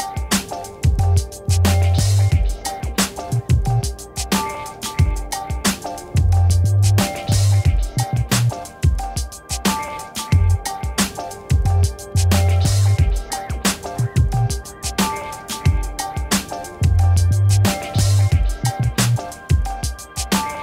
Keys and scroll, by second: 2.5 b.